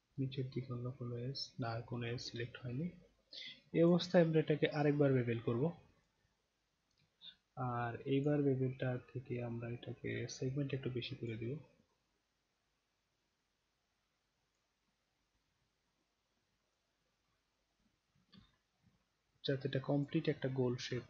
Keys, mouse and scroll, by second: 4.8 click, 6.0 click, 8.2 click, 10.2-11.3 drag, 12.0-14.5 drag, 15.3-16.7 drag, 18.4-20.0 alt+drag, 20.4-21.0 alt+right drag.